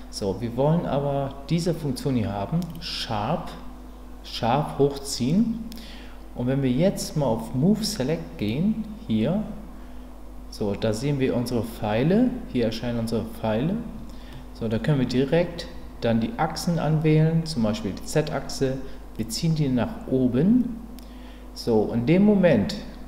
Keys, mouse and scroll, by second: 8.4 click, 14.3 middle click, 19.2-23.0 drag.